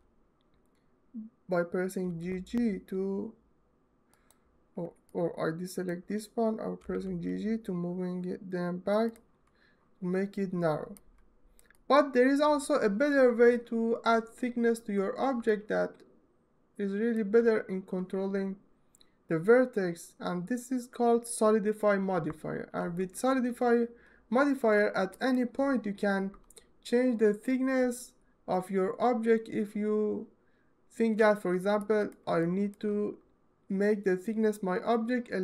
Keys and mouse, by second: 1.8 g, 3.9 click, 5.0 click, 8.8 click, 10.9-11.3 drag, 11.5 alt+middle click, 11.8-14.5 alt+middle drag, 12.9 ctrl+z, 15.4-16.9 alt+middle drag, 23.0 ctrl+z, 24.8 ctrl+alt+right click, 31.7 alt+middle click, 32.4 ctrl+alt+middle click.